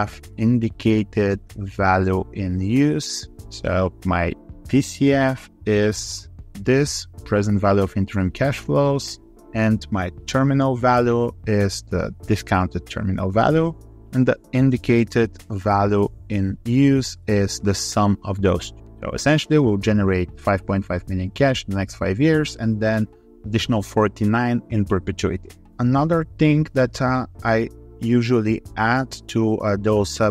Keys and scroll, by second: 26.7 ctrl+c, 30.1 v.